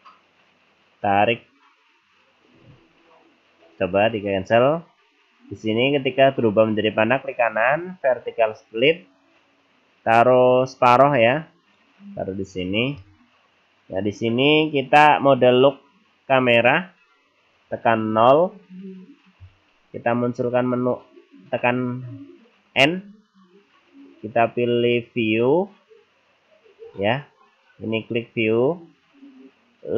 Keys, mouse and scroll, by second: 7.5 right click, 13.0 middle click, 14.1-15.0 scroll up 5, 15.0-16.0 scroll down 3, 18.2 KP_0, 22.8 n, 25.2 click, 26.9 click, 28.0 click.